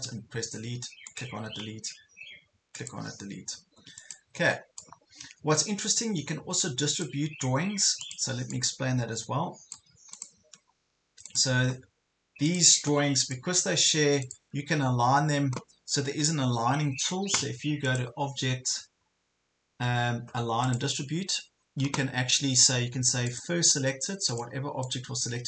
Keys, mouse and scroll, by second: 0.0 Delete, 1.4 Delete, 3.0 Delete, 4.0-10.2 drag, 10.6 ctrl+scroll up 1, 11.3 click, 12.5 ctrl+click, 14.2 shift+click, 17.8-24.8 drag.